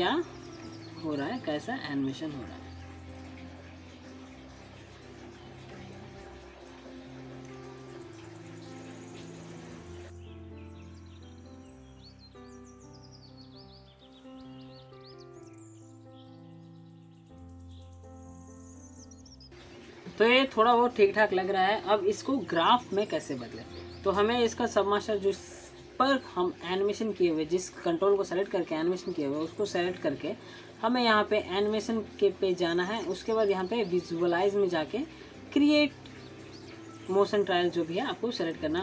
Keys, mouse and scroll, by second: 0.8 click, 1.0 scroll down 1, 1.4-1.8 alt+scroll up 1, 1.8 alt+middle click, 2.5-3.2 drag, 3.9 alt+middle click, 4.1 alt+click, 8.2 click, 8.4-9.4 drag, 10.2 click, 10.6 scroll down 1, 10.7 click, 10.9 shift+middle click, 11.0 shift+middle click, 11.3 shift+scroll down 1, 11.4 click, 12.2-12.9 click, 13.8-14.1 scroll up 2, 13.8 alt+middle click, 14.1-14.9 click, 14.9 scroll down 1, 15.1 alt+middle click, 15.2 alt+scroll up 1, 15.3 click, 15.4 shift+middle click, 15.7 click, 15.9 shift+middle click, 16.1 ctrl+z, 16.2 shift+click, 16.5 shift+middle click, 16.8 ctrl+z, 16.9 click, 17.2-17.5 shift+middle click, 17.5 shift+click, 17.6 scroll down 1, 17.7-18.3 click, 20.7 click, 21.1-21.7 alt+drag, 25.3 click.